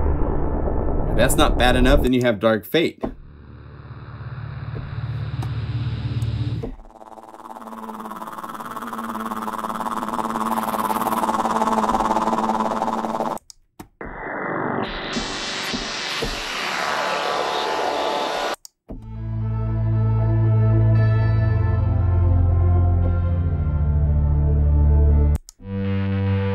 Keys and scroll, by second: 20.8 F2.